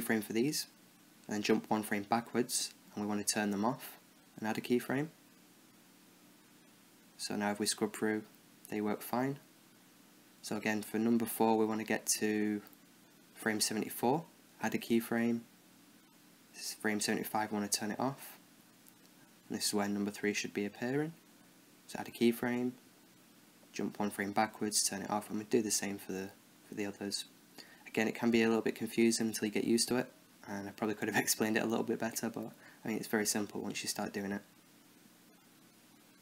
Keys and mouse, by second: 0.5 i, 2.3 Left, 3.8-6.6 drag, 5.4 i, 5.8 i, 6.6-6.9 Left, 7.0-7.6 Right, 7.9 Right, 8.1-8.7 Right, 9.3-10.6 middle drag, 10.9 right click, 12.0-13.0 Right, 13.3 Right, 13.6 Left, 14.7 i, 15.1 i, 15.9 i, 16.6 Right, 17.5-19.9 drag, 17.8 i, 18.3 i, 19.5 space, 21.9 i, 22.4 i, 23.0 Left, 23.9-25.4 drag, 24.1 i, 24.6 i, 25.4 Right, 25.8 Right, 25.9-26.9 Right, 27.0 Right, 27.3 Right, 27.5 Left, 29.1 i, 29.5 i, 30.2 Right, 30.9-32.5 drag, 31.2 i, 31.6 i, 32.5 middle click, 33.3 right click, 34.0 space, 35.9 i.